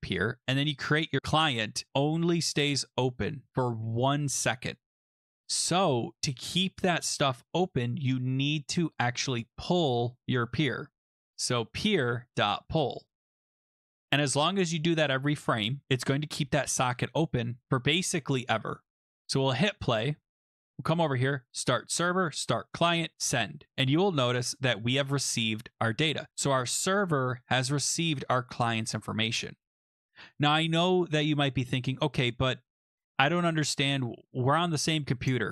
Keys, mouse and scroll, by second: 0.1 click, 0.4-0.7 scroll, 7.1-8.0 scroll, 8.0-10.3 scroll, 10.3 click, 10.9-13.9 typing, 14.1 ctrl+s, 18.7 click, 19.6 click, 20.9 click, 21.5 click, 22.3 click, 23.1 click, 24.1 click.